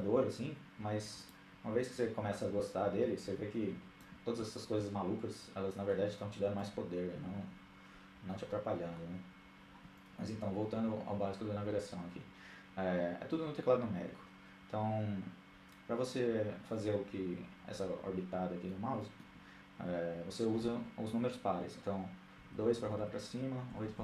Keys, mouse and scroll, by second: 1.0-2.6 drag, 4.5-5.9 drag, 7.1-9.4 middle drag, 10.1-12.7 middle drag, 18.5-19.9 middle drag, 20.8-22.2 middle drag.